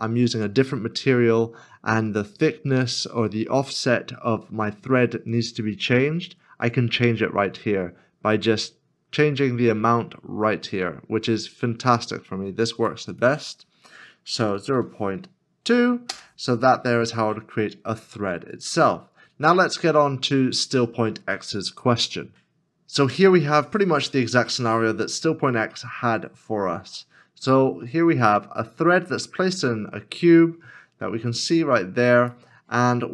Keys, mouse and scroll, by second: 14.4 0, 14.5 ., 14.8 2, 16.1 Return, 17.3 scroll down 1, 19.6 middle click, 25.8 middle click.